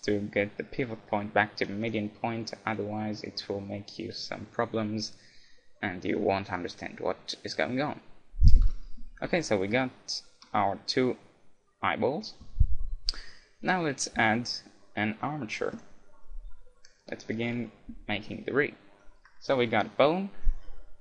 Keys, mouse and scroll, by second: 8.6 KP_1, 12.4 a, 14.2 shift+a.